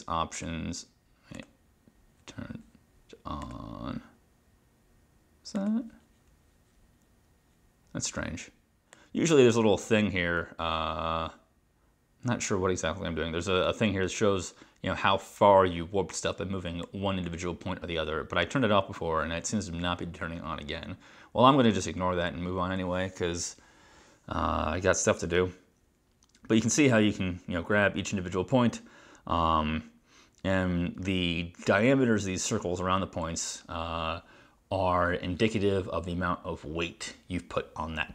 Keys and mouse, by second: 0.4 click, 1.4 click, 3.5 click, 9.0 click, 17.0 click.